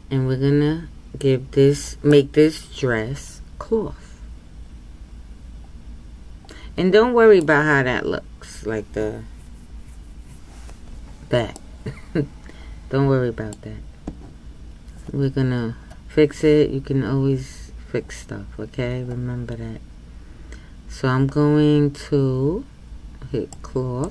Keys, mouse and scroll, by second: 2.1-5.1 middle drag, 11.6-24.1 middle drag.